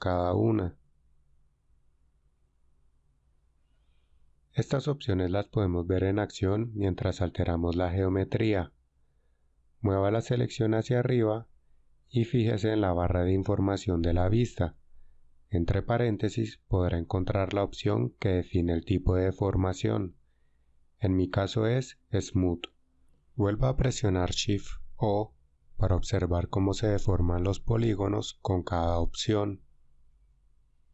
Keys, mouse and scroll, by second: 10.2 g, 24.9 shift+o, 26.1 shift+o, 27.4 shift+o, 30.5 shift+o.